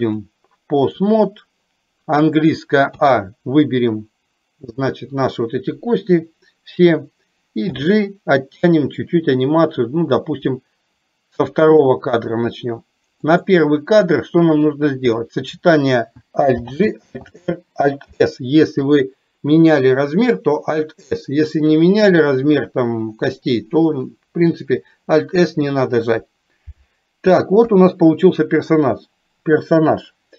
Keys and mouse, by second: 0.2 click, 13.4 click, 14.8 middle click.